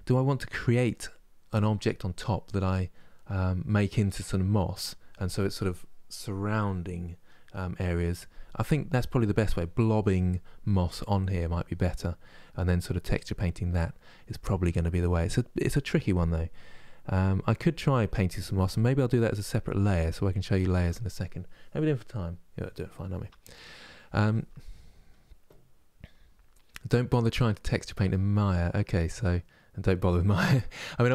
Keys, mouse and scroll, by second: 2.9-31.1 middle drag.